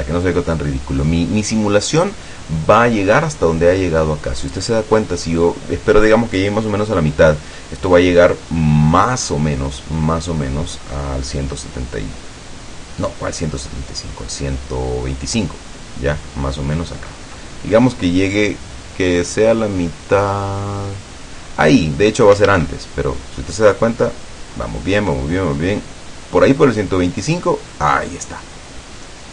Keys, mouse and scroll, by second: 0.0-0.3 scroll up 2, 0.7-1.3 middle drag, 2.3-3.1 middle drag, 22.6 alt+a.